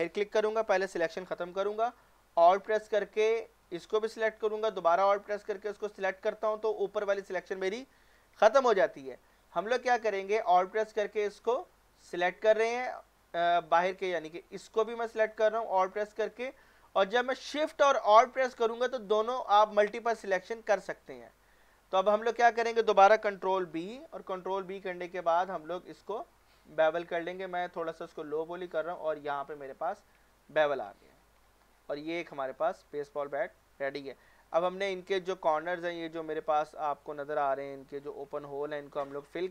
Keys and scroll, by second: 23.7 ctrl+b, 30.8 Tab.